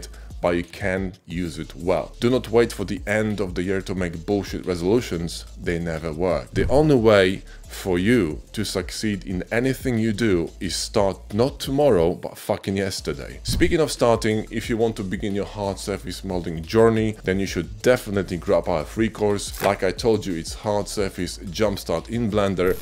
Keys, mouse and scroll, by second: 19.7 g, 19.8 x, 20.9-22.4 drag.